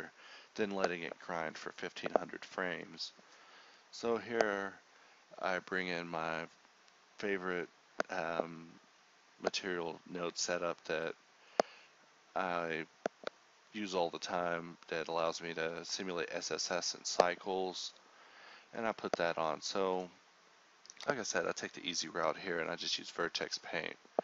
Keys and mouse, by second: 0.3 a, 1.9 click, 2.7 shift+k, 4.2-5.4 drag, 6.2 shift+k, 6.5 Tab, 6.7 Tab, 7.0 alt+z, 7.2 KP_Divide, 7.9 click, 8.4 shift+k, 8.9-9.6 drag, 9.6 ctrl+z, 10.2 ctrl+z, 10.2 Tab, 10.7 ctrl+Tab, 11.2-12.2 drag, 12.2 Tab, 12.8 shift+k, 15.6 Tab, 16.1 h, 16.5 l, 18.0 click, 18.2 Tab, 19.7 Tab, 20.3 l, 20.5 Tab, 21.1 Tab, 21.4 h, 22.0 l, 22.3 Tab, 22.7 click.